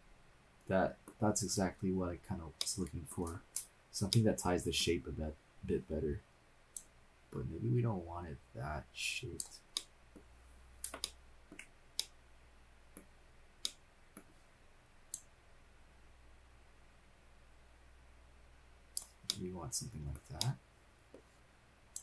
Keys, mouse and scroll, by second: 2.6-3.1 middle drag, 3.5-4.1 shift+scroll up 3, 4.1-4.9 middle drag, 5.1-5.6 scroll down 1, 6.3 click, 7.2-9.5 drag, 9.7 middle click, 10.4-10.9 scroll up 1, 10.9 scroll up 1, 11.0 shift+middle click, 12.1-13.0 middle drag, 13.3 scroll down 1, 13.6-15.1 middle drag, 15.1-18.6 drag, 18.6 middle click, 19.3-20.4 middle drag, 20.5-21.2 middle drag, 21.9-22.0 drag.